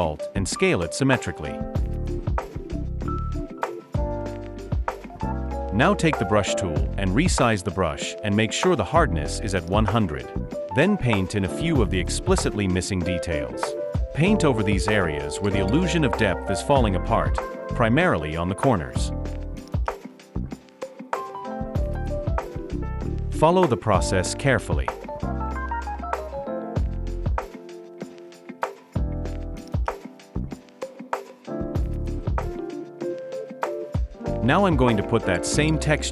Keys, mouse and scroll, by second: 11.7 alt+scroll up 1, 24.0-25.0 alt+scroll down 1, 25.7-26.2 alt+scroll up 1, 33.3-34.3 alt+scroll down 1.